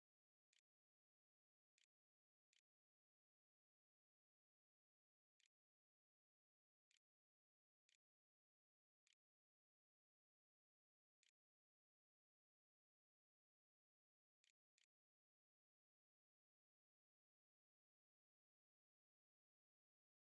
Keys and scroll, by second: 0.0-11.1 typing, 13.3-14.2 typing, 14.4 Return, 15.8-16.7 typing.